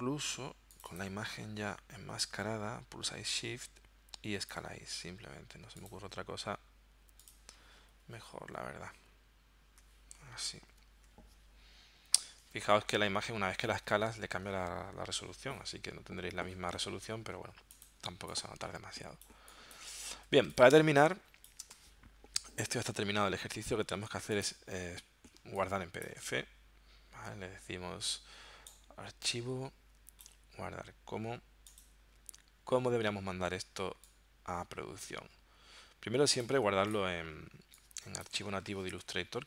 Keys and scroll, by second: 8.5 shift+Left, 10.7 shift+Right, 18.1 space, 20.7 space, 21.8 v, 25.4 space, 38.7-39.4 typing.